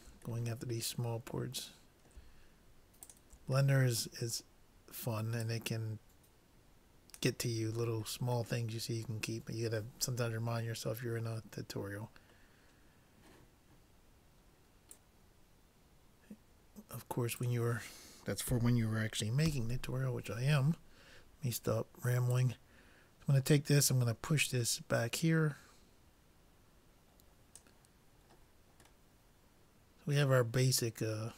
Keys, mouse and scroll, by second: 3.1-4.7 drag, 3.9 middle click, 4.7 middle click, 5.5-7.1 drag, 7.9-10.5 middle drag, 17.5-19.1 drag, 19.5 ctrl+l, 22.3-24.2 drag, 28.2-30.9 middle drag.